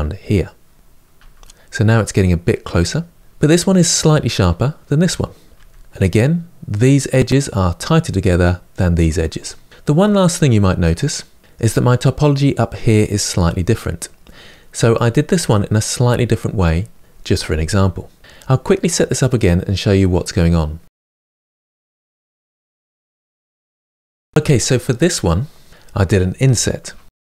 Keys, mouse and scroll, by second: 0.9 Tab, 3.2 Tab, 5.3 Tab, 9.8-20.4 middle drag, 20.4 Tab, 20.7 shift+a, 21.0 g, 21.2 s, 21.4 s, 22.0 click, 22.1 Tab, 22.2 middle drag, 22.3 Tab, 22.5 shift+middle click, 22.5 scroll up 4, 22.7 ctrl+a, 22.8 Tab, 22.9 ctrl+r, 23.1 ctrl+r, 23.2 ctrl+z, 23.4 click, 23.4 middle click, 23.5 Tab, 23.5 click, 23.8-26.6 middle drag.